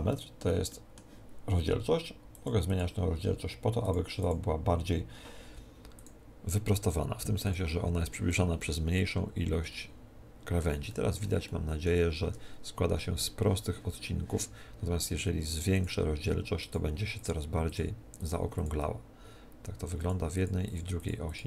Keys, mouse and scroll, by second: 2.3-9.2 drag, 8.6-10.4 middle drag, 10.8-14.0 middle drag, 15.7-21.4 drag.